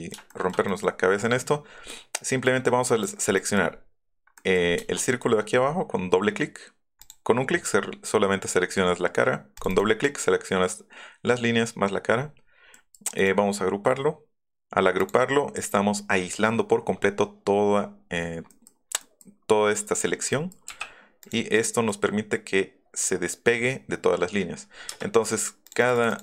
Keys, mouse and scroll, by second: 0.3 shift+middle click, 0.7 middle click, 1.0 middle click, 1.9 middle click, 3.3 middle click, 3.7-4.0 scroll up 3, 4.4 middle click, 7.0 click, 9.6 click, 12.6 scroll down 2, 13.2 right click, 15.0 click, 18.9 middle click, 19.7 middle click, 21.2 click, 21.7 middle click, 24.9 space, 25.6 click, 25.8 click, 25.9 click, 26.1 click.